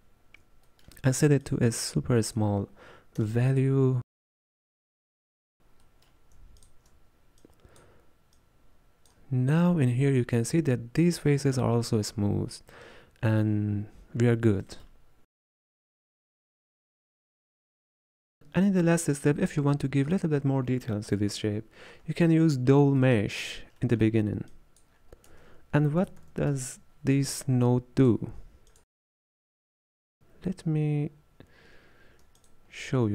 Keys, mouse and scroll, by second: 3.3-6.7 drag, 8.4-9.5 drag, 9.5-10.3 scroll up 4, 10.4-11.1 scroll down 1, 15.7 scroll down 2, 16.0-18.4 middle drag, 18.4 click, 22.2-24.5 shift+middle drag, 24.5-28.2 drag, 28.2 space, 32.5 alt+shift+click.